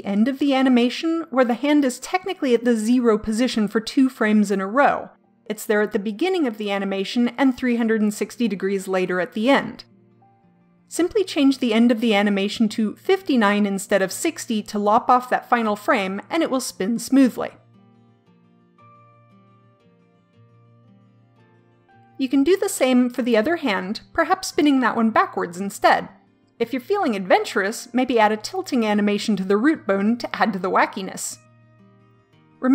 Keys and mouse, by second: 8.7-13.9 drag, 18.4-20.3 drag.